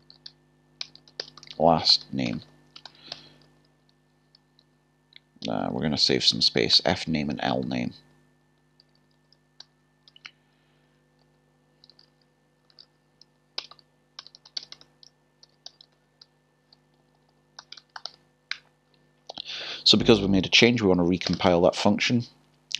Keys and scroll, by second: 0.8 typing, 4.6-5.2 typing, 11.8-13.1 typing, 16.7 typing.